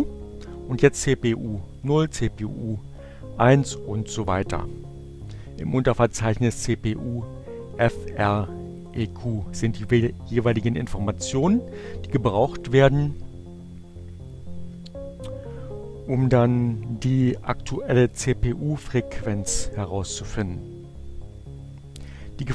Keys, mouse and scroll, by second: 4.6 click, 6.0 click, 9.2 click.